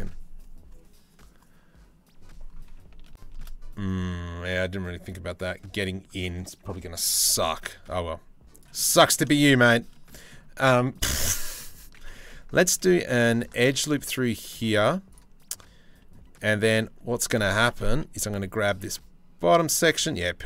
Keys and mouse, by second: 2.7-3.0 shift+middle drag, 3.6-5.8 middle drag, 6.7 Tab, 7.3 s, 9.0 shift+middle click, 13.1 ctrl+r, 14.4 3, 14.7 click, 15.2 click, 16.1 click, 16.8 click, 18.3 2, 18.3 g, 19.5 g.